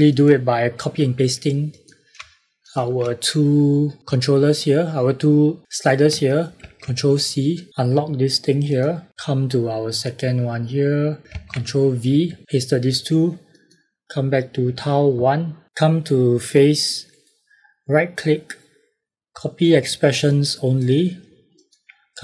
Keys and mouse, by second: 2.6 shift+click, 6.5 ctrl+c, 7.7 click, 11.3 ctrl+v, 13.5 click, 17.0 right click, 20.2 click.